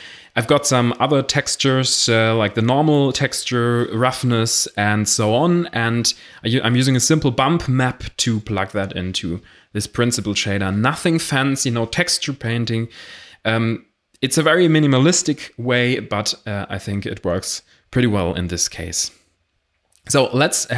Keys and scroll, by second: 2.2 ctrl+space, 14.1 a.